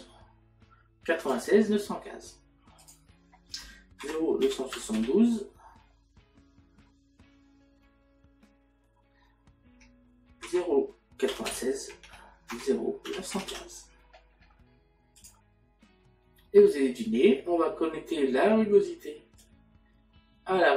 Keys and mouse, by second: 1.2 click, 2.8 click, 10.5 KP_Decimal, 12.1 Tab, 12.5 KP_Decimal, 19.5 click.